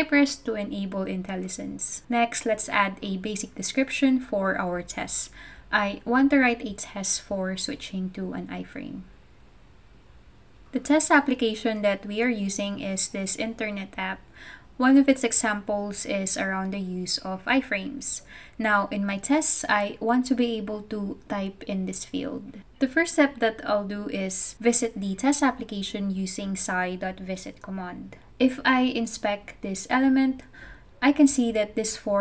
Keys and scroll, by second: 0.0-11.0 typing, 0.1 Return, 12.1 Return, 21.4-26.4 typing, 22.8 Return, 26.7 super+v, 27.7 Right, 28.2 Right, 28.2 Return.